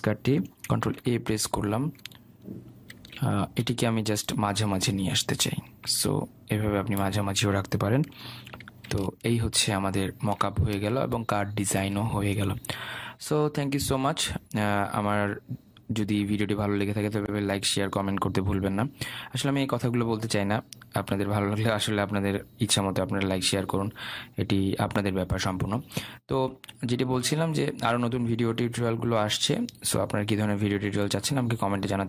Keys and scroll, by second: 1.4 ctrl+a, 3.7 ctrl+d.